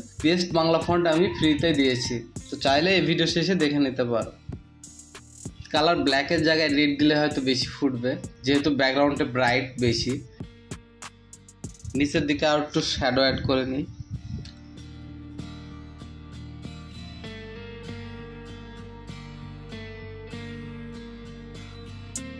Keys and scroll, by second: 20.0-22.3 typing.